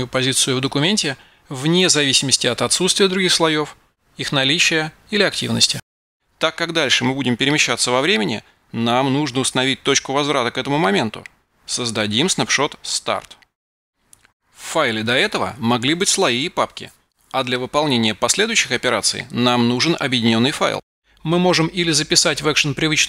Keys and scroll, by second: 12.5-14.3 typing.